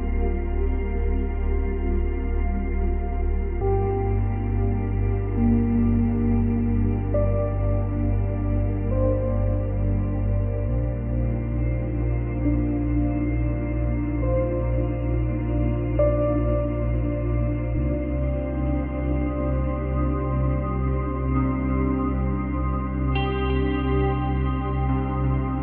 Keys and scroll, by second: 0.0 ctrl+z, 2.1 ctrl+z, 3.3 space, 4.9 space, 8.4 space, 9.1 space, 9.9 space, 10.7 space, 13.4 space, 16.3 space, 23.8 space, 24.4 space.